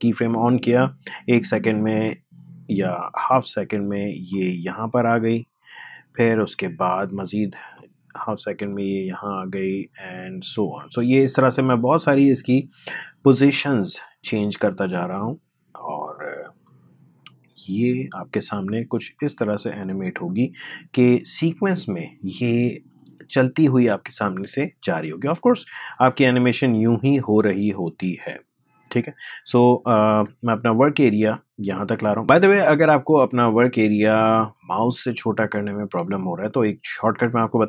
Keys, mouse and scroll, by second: 0.9-32.2 drag, 32.2 ctrl+z, 34.5-37.6 drag.